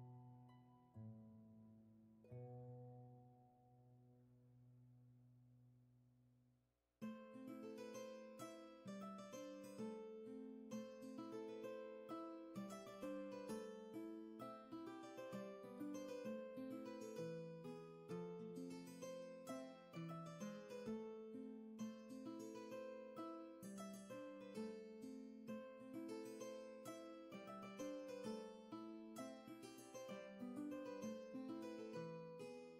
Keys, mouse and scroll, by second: 4.0 space, 16.8 ctrl+z.